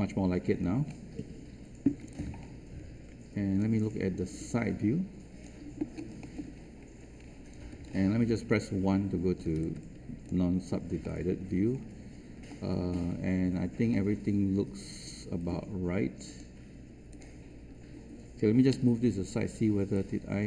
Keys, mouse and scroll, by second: 0.5-1.2 scroll up 1, 2.0-5.4 drag, 6.1 alt+middle click, 6.5-6.9 scroll up 1, 8.2 1, 9.5 alt+space, 9.6 click, 11.0 alt+middle click, 11.7-12.0 scroll up 1, 12.4 alt+middle click, 13.0-13.3 scroll up 1, 13.9-15.4 alt+middle drag, 16.2 click, 18.7 w, 19.9-20.4 drag.